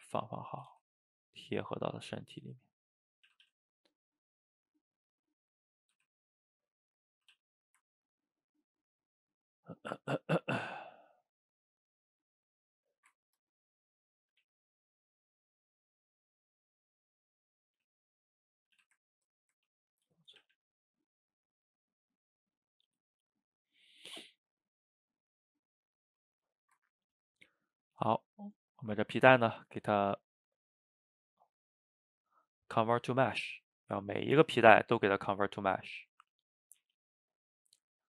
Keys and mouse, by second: 0.0 r, 0.8 g, 1.6-3.3 middle drag, 3.3 a, 3.5 a, 3.8 click, 4.0-6.0 middle drag, 6.0 r, 7.4 a, 7.5-11.2 middle drag, 11.4 drag, 11.6-13.0 middle drag, 13.0 shift+right click, 13.2-14.4 ctrl+middle drag, 14.4 g, 15.4-17.7 middle drag, 17.7 g, 18.7 a, 18.8 a, 19.0-19.7 ctrl+middle drag, 19.7 ctrl+s, 20.3 shift+middle click, 20.4 a, 20.6 a, 20.9-24.0 middle drag, 26.3 shift+middle drag, 26.6 shift+right click, 26.9-27.4 ctrl+middle drag, 27.4 click, 27.7-28.8 shift+middle drag, 28.8-31.9 drag, 33.7-34.5 middle drag, 34.5 click, 34.8-35.8 shift+middle drag, 35.8-38.0 drag.